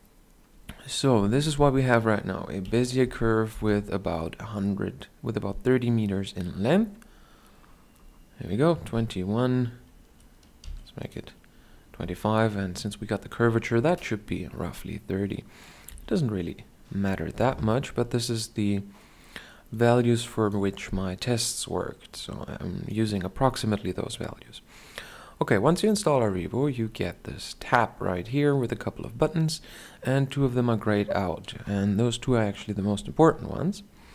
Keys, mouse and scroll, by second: 10.1 s, 11.7-15.4 drag, 15.4 KP_7, 22.2-34.1 drag.